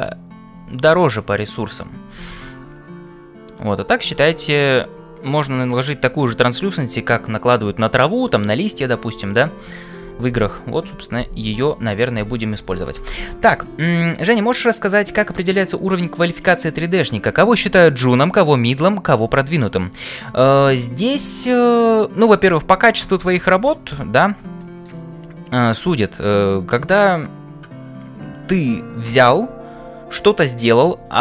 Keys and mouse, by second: 24.7 shift+middle click, 25.8-26.8 middle drag.